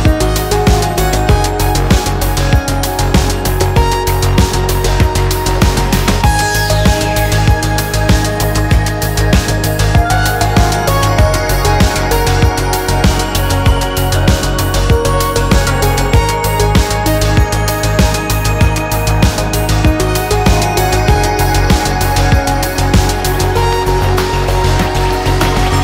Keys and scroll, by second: 7.9 6, 8.3 Return.